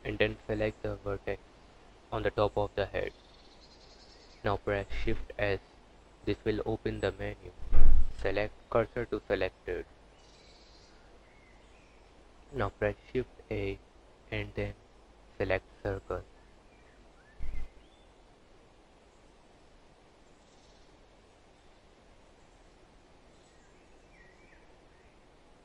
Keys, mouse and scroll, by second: 0.5 click, 1.9 click, 2.6 click, 3.0-3.5 scroll down 10, 5.0 shift+s, 8.9 Tab, 11.6 shift+a, 16.4 click, 19.6 KP_1, 21.2 s, 23.2 g.